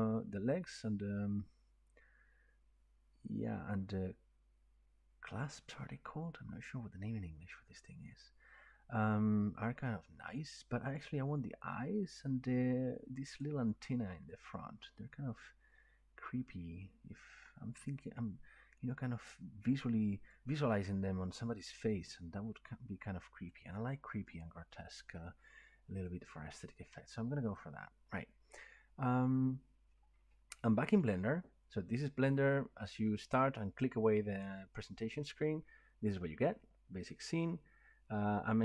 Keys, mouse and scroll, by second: 10.9 click, 13.4 click, 17.3-18.0 drag, 18.4 click, 20.7-25.1 drag, 26.0 click, 27.6 click, 29.4 click.